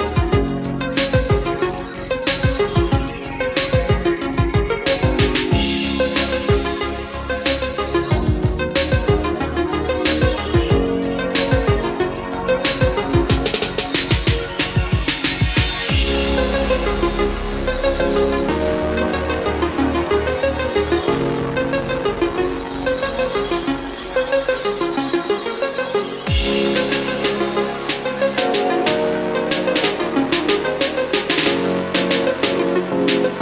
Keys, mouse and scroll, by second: 1.5 space, 2.5 click, 3.8 KP_3, 6.9 click, 10.1 KP_4, 12.7-15.7 drag, 15.9 Up, 16.5 typing, 17.8-24.8 drag, 33.2-33.4 scroll up 1.